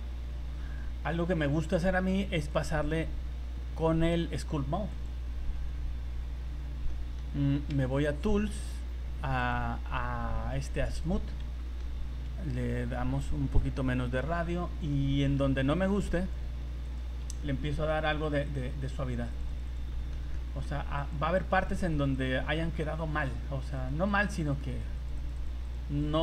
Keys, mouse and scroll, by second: 0.0 middle click, 2.5 click, 6.6 scroll up 2, 6.9 middle click, 8.3-9.3 scroll up 17, 9.4 click, 11.2 scroll up 2, 11.6 shift+middle click, 11.9 scroll up 2, 12.8 click, 13.6 click, 14.4-14.7 scroll up 2, 15.9 click, 16.9 click, 17.5 middle click, 17.9 shift+middle click, 18.4 click, 18.8 click, 19.2 click, 19.4 click, 19.5 click, 19.7 click, 19.9 shift+middle click, 20.3 middle click, 21.0 click, 21.6 click, 21.7 click, 21.9 click, 22.2 click, 22.4 middle click, 22.9 scroll up 2, 23.2 shift+middle click, 23.4-23.8 scroll up 2, 23.7 click, 24.1 click, 24.4 click, 24.5 click, 24.7 click, 25.0 click, 25.2 click, 25.4 click, 25.6 click, 26.0 click.